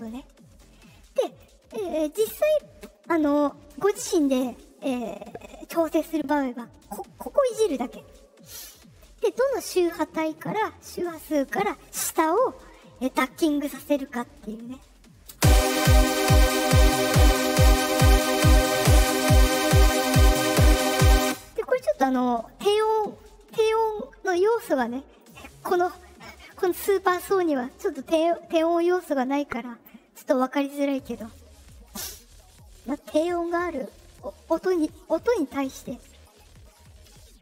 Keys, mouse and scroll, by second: 0.0-1.3 drag, 6.7-21.1 drag, 15.2 space, 21.2 space, 25.1 click, 30.7 click, 33.9-35.1 drag.